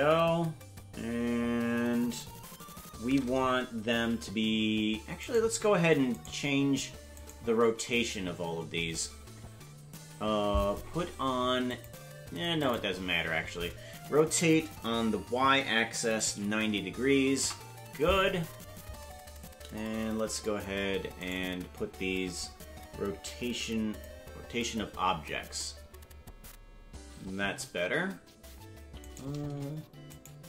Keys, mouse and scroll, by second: 5.3 right click, 6.2 shift+right click, 11.6 click, 13.9 r, 21.3 right click, 23.9 click, 29.1 right click, 30.2 shift+right click.